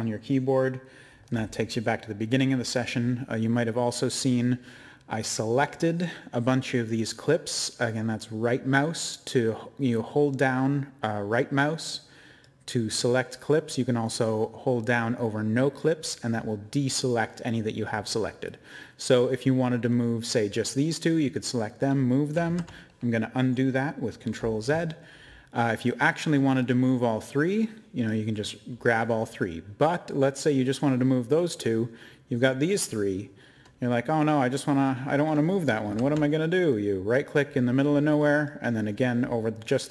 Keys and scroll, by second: 22.4 ctrl+z, 35.8 ctrl+z.